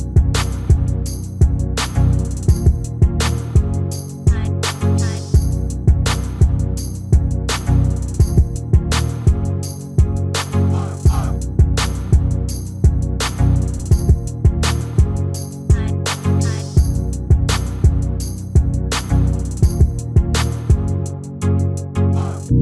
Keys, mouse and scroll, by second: 1.3 ctrl+z, 1.9 click, 5.2-6.9 middle drag, 6.9 right click, 7.2-10.5 middle drag, 10.9 click.